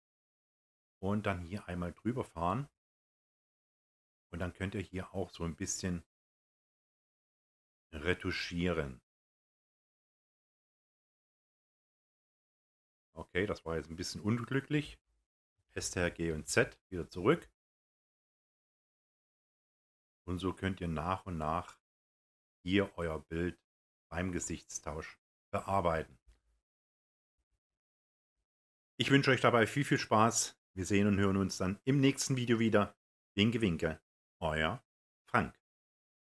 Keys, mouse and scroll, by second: 15.5 ctrl+z.